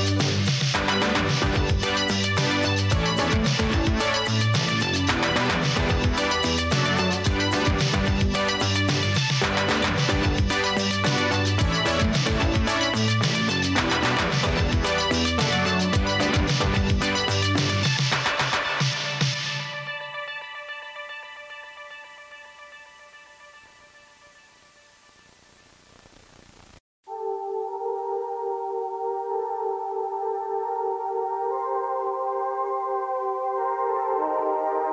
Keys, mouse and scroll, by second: 0.5 space, 1.5 space, 2.7 s, 4.8 space, 5.9 space, 8.1 space, 9.4 space, 10.3 space, 16.7 space, 18.6 space, 20.0 space, 21.3 space, 30.4 space, 32.6 space.